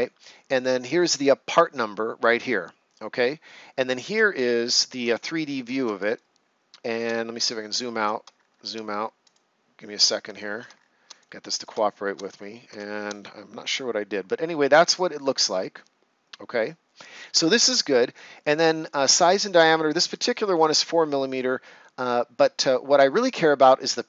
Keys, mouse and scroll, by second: 5.0 right click, 7.5-8.0 ctrl+scroll down 1, 8.3-8.7 shift+scroll down 1, 9.2 click, 9.8-10.1 scroll down 1, 10.3-10.7 ctrl+scroll down 2, 11.1 right click, 11.8 shift+scroll down 1, 12.3 ctrl+scroll down 1, 13.0 shift+scroll down 1, 13.2 right click.